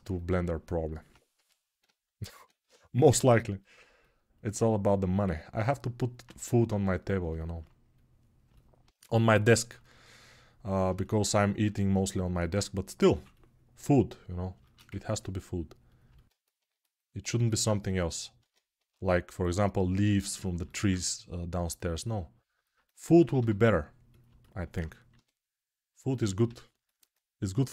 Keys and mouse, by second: 1.1 g, 12.9 6, 18.2 ctrl+Tab, 18.6 shift+a, 20.8 Tab, 24.0-27.7 alt+middle drag, 26.8 g.